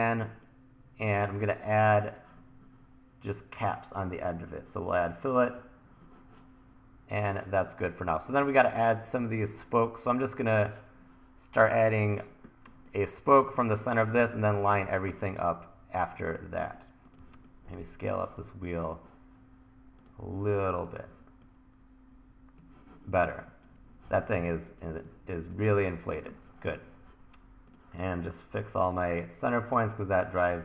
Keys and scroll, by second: 8.4 1, 13.4 1, 17.2 t, 18.4 e, 21.1 t, 23.3 1, 25.1 1.